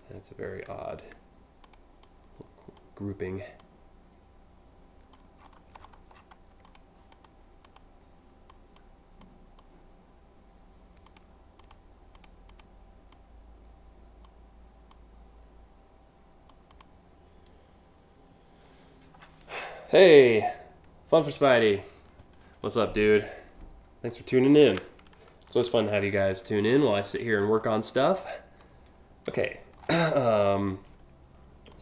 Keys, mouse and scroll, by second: 0.3 ctrl+alt+z, 1.3 click, 1.7-2.4 drag, 3.2-4.8 drag, 5.1-5.9 scroll down 3, 6.3 click, 6.8 click, 7.3 click, 8.1 click, 8.8 click, 10.7 shift+click, 11.2 shift+click, 11.8 click, 12.2 click, 12.8-13.9 drag, 14.5-16.1 drag, 16.4 click, 27.1-27.5 scroll up 2, 27.8 scroll down 2, 28.9 scroll down 1, 29.5-29.9 scroll up 3, 30.0 scroll down 2, 31.3-31.8 drag.